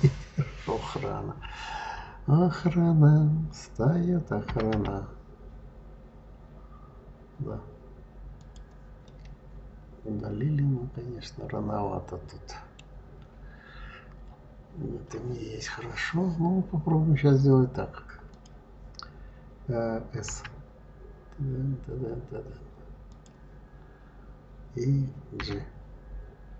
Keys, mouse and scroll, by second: 4.4 g, 8.9-12.0 middle drag, 13.0-14.9 scroll down 4, 18.1 click, 20.2 s, 25.2 g.